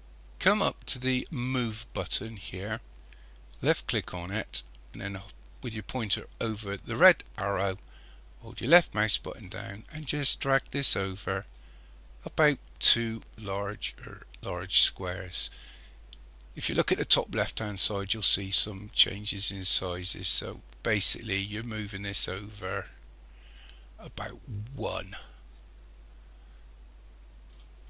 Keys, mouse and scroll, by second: 3.6 click, 8.6 click.